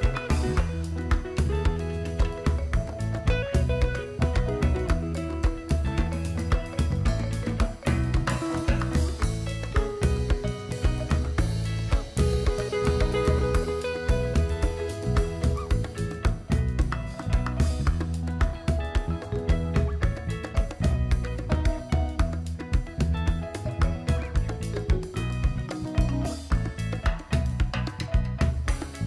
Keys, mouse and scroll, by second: 7.5 click, 12.5 click, 13.7 Delete, 14.7 click, 15.7 Delete, 16.6 alt+scroll down 1, 16.8-17.2 alt+scroll up 1, 17.5 click, 17.9 right click, 18.7 click, 19.1 alt+scroll down 1, 19.3 alt+scroll up 1, 19.8-21.2 drag, 21.2 alt+scroll up 1, 22.4-27.0 shift+drag.